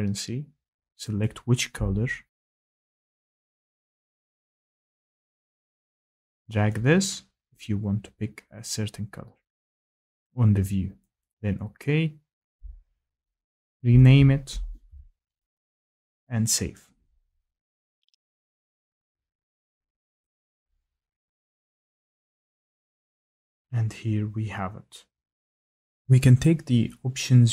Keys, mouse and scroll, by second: 3.8 click, 10.2 click, 11.2 click, 12.9-13.3 scroll down 3, 13.7 click, 13.7-14.0 scroll, 14.0 click, 14.8 2, 14.9-16.2 scroll down 3, 16.2 scroll, 16.3 scroll down 3, 16.7 click, 18.8 click, 20.1 click, 20.2 click, 21.3 click, 25.7 click.